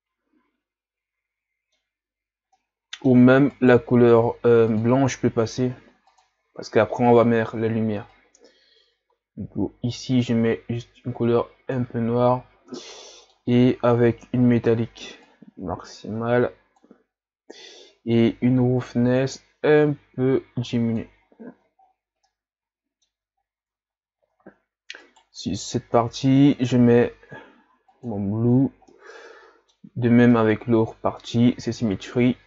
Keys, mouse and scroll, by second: 3.6 right click, 6.2 click, 15.4-17.3 drag, 19.0 click, 21.2 click, 21.5 a, 21.8-22.2 scroll down 4, 22.2-23.4 middle drag, 23.4-24.8 scroll up 7, 25.1 right click, 27.8-28.9 drag, 28.9-32.4 middle drag.